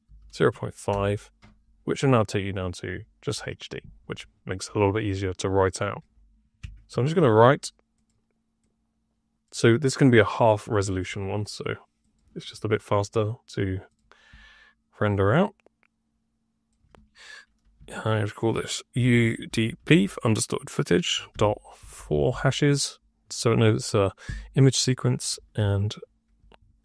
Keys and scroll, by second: 0.0 KP_0, 0.1 KP_Decimal, 0.4 KP_5, 0.8 Return, 6.5 Tab, 6.8 w, 7.1 r, 18.8 shift+u, 19.4 shift+d, 19.7 shift+^, 21.2 ;, 21.7 ², 24.1 ;, 25.5 f, 26.3 BackSpace, 26.7 j.